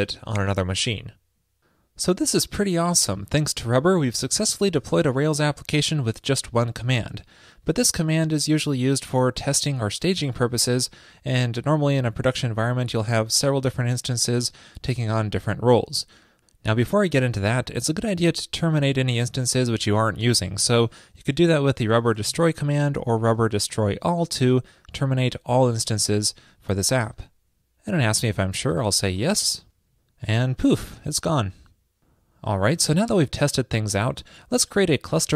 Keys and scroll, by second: 20.3 alt+BackSpace, 20.6 alt+BackSpace.